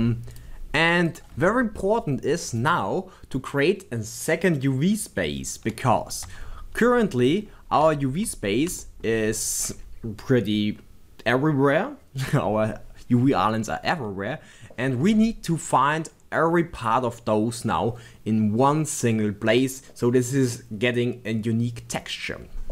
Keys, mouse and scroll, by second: 0.3 click, 1.1 click, 6.3 b, 7.0-8.8 scroll down 4, 8.0-8.3 shift+middle drag, 8.8-9.1 shift+middle drag.